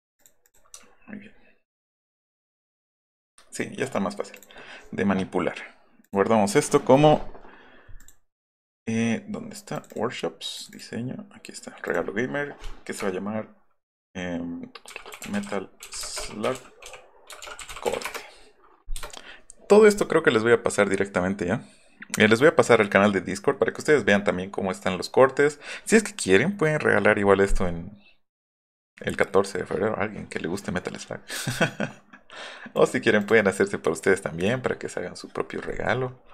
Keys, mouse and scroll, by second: 0.2 click, 0.4 click, 0.8 alt+middle click, 1.3 alt+middle click, 1.8 alt+middle click, 2.6 alt+middle click, 3.3 middle click, 4.4 click, 6.0 click, 8.0 click, 9.7 click, 9.9 click, 10.5 click, 11.8-13.0 drag, 14.6-18.5 typing, 31.5 click, 32.8 click, 33.2 click, 34.2 click.